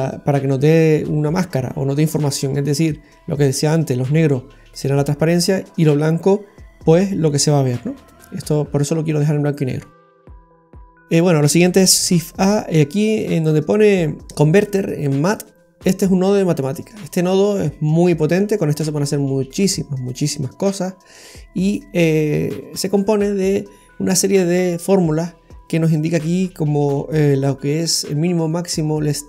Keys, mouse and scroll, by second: 8.2-8.7 scroll down 3, 8.8 middle click, 9.8-10.4 scroll down 4, 10.4 middle click, 12.0 shift+a, 17.0-17.9 scroll up 8, 18.0 middle click, 18.6 scroll up 1, 21.1 click.